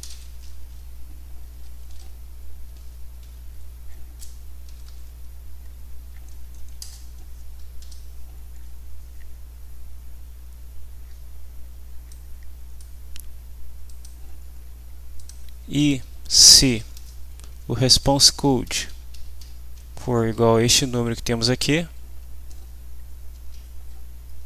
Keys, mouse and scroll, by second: 0.0-0.9 typing, 4.4-5.4 typing, 6.4 Down, 6.8 Return, 7.8 F5, 12.1 click, 13.9 click, 15.1 click, 15.8 Down, 16.0 Home, 16.3-17.2 typing, 17.2 Delete, 18.3 End, 18.6-20.9 typing, 22.5 ', 22.6 Left, 23.3 ', 23.5 End.